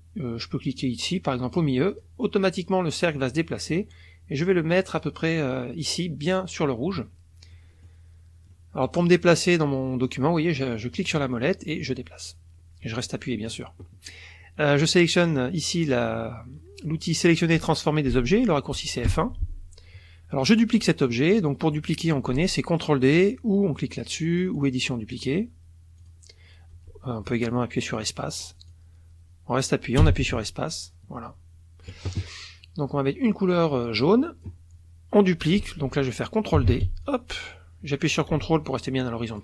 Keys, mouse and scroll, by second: 1.5 click, 3.7-5.2 drag, 7.5 middle click, 8.5 middle click, 8.7 click, 10.9 middle click, 11.4-13.7 drag, 19.1 F1, 24.5 click, 26.0 click, 28.7-32.0 drag, 30.0 space, 33.3-34.6 drag, 36.6 ctrl+d, 37.0-39.4 ctrl+drag.